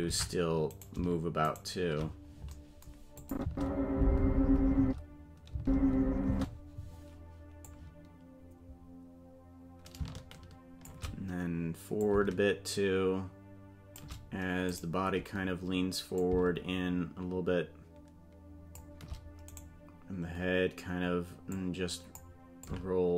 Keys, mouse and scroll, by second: 0.1 ctrl+Tab, 0.8 right click, 1.5 shift+right click, 3.2 click, 3.4 space, 4.8 space, 5.5 space, 6.3 space, 7.6-10.9 drag, 12.0-14.0 shift+drag, 14.8 right click, 16.2-18.8 shift+drag, 19.6 right click, 21.5 click, 22.6-23.1 shift+drag.